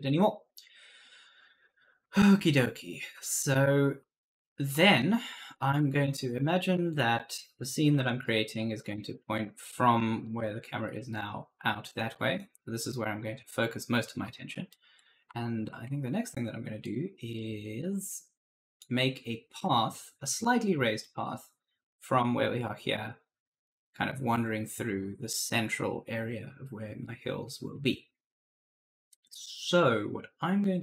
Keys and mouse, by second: 0.0-8.7 typing, 0.5 right click, 6.9 right click, 10.1 right click, 10.7 w, 12.0 right click, 14.7 right click, 14.9 right click, 14.9-17.7 typing, 22.4 right click.